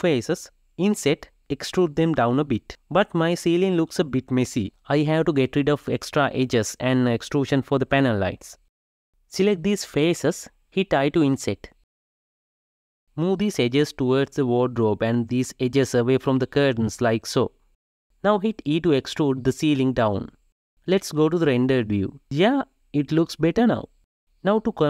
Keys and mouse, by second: 2.3 shift+Left, 2.4 shift+Left, 3.1 shift+click, 3.8 shift+click, 5.2 shift+click, 5.9 f, 6.1 shift+click, 6.3 f, 6.5 shift+middle click, 8.2 middle click, 8.4 g, 9.3 x, 9.3 ctrl+middle click, 9.6 f, 9.8 ctrl+middle click, 10.0 i, 14.8 g, 15.8 g, 17.7 g, 18.7 shift+middle click, 19.3 e.